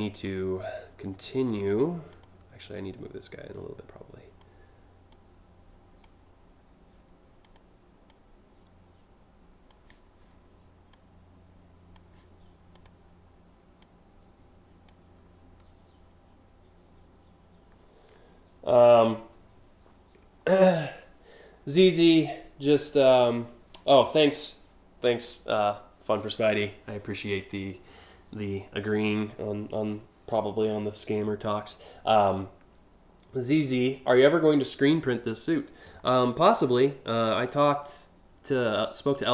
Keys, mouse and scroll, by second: 1.3 click, 1.7 click, 2.3-4.0 drag, 4.7 click, 7.0 click, 7.7-9.3 drag, 10.5-11.6 drag, 12.4 click, 13.4-14.4 drag, 36.7 click, 37.1 click, 38.5 click, 38.8-39.3 drag.